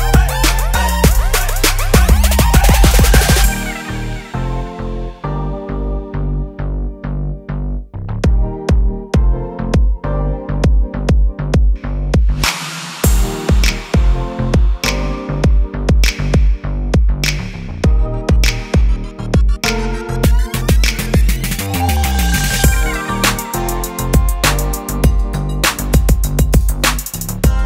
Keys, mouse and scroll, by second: 3.1 right click, 6.7 click, 15.7 right click, 19.1 click, 24.1 click.